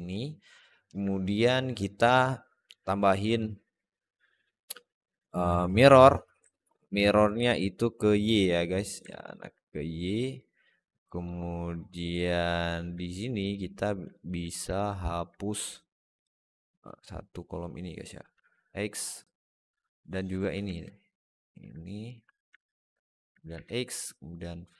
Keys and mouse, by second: 0.5 alt+middle click, 3.2-5.8 drag, 6.3 alt+middle click, 7.3 click, 8.0 click, 8.9 alt+middle click, 10.2 click, 11.6 alt+middle click, 13.2 click, 14.0 alt+middle click, 14.6 alt+middle click, 16.1 click, 18.2 x, 20.2 shift+click, 20.6 alt+middle click, 22.4 alt+middle click, 23.4 x.